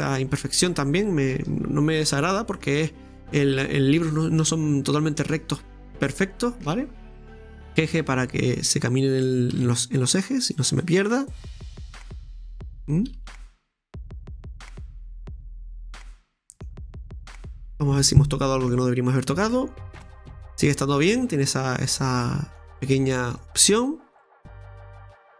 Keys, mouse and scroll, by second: 0.3-1.1 scroll up 1, 1.1 shift+middle click, 1.7-2.6 scroll up 1, 2.6-5.2 middle drag, 5.2-5.7 scroll up 1, 5.7-6.2 scroll down 1, 6.2 middle click, 6.7-7.1 scroll down 1, 7.1 right click, 7.8 g, 9.3 right click, 9.5 g, 11.5 right click, 11.7 g, 12.9 right click, 13.2 g, 18.6 middle click, 18.7 click, 19.3-19.9 scroll down 1, 19.9 Tab, 20.2-22.0 scroll down 2, 20.4-22.7 middle drag, 22.2 scroll up 1, 22.7 Tab, 23.4 shift+middle click, 23.8-24.2 scroll up 2, 24.2-25.3 middle drag.